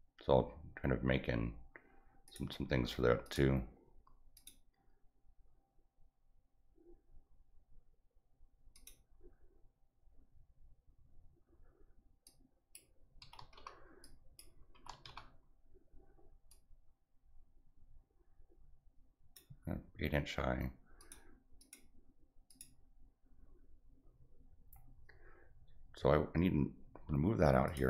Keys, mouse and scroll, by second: 2.2 click, 3.2 click, 4.3 click, 8.7 click, 12.2 click, 14.0 click, 16.5-19.3 drag, 20.9 click, 21.5 click, 22.4 click, 27.6 click.